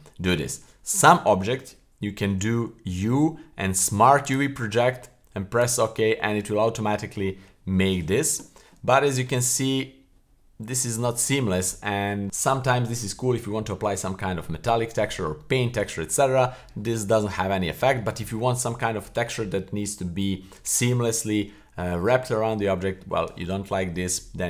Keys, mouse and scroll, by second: 2.3 u, 9.0-12.0 scroll up 4, 12.0 scroll down 2, 16.0 middle click, 17.5-17.9 middle drag, 24.1-24.4 scroll up 3.